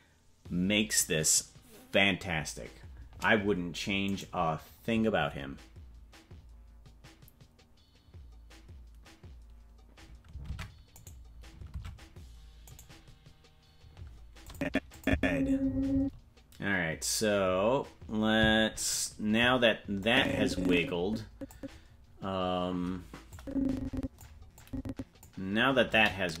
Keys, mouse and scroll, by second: 4.1 right click, 10.5 ctrl+Tab, 11.0 right click, 11.8 ctrl+Tab, 12.8 right click, 14.5 click, 14.9 click, 15.1 space, 15.9 space, 20.0-21.6 drag, 23.3 click, 24.6 click, 25.9 KP_0.